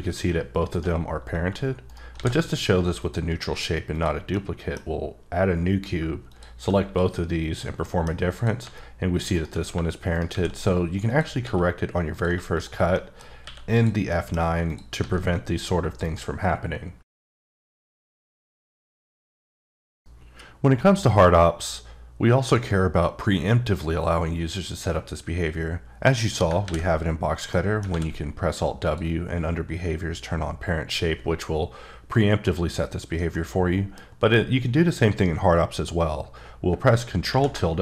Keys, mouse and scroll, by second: 0.7 right click, 2.1 shift+a, 3.0 click, 3.3 s, 3.9 click, 4.3 middle click, 6.3 shift+click, 6.8 shift+q, 7.4 click, 7.8 middle click, 8.3 click, 8.6 g, 9.3 right click, 10.2 shift+a, 11.1 click, 11.4 s, 12.1 click, 12.9 middle click, 13.4 q, 13.7 click, 14.1 middle click, 14.7 click, 14.9 g, 16.0 right click, 27.8 alt+Num_Lock, 27.8 alt+scroll up 1, 27.9 alt+w, 28.8 click, 33.3 middle click, 36.7 middle click.